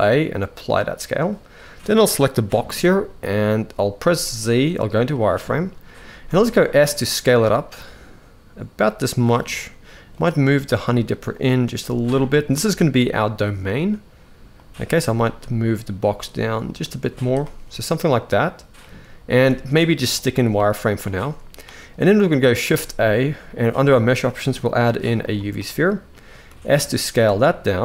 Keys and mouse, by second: 1.9 click, 3.8 z, 5.8 s, 9.9 click, 10.3 g, 11.4 r, 14.3 click, 14.7 g, 16.8 z, 17.5-18.5 middle drag, 19.1 z, 20.3-20.8 middle drag, 20.9 shift+middle click, 22.4 shift+a, 26.2 s.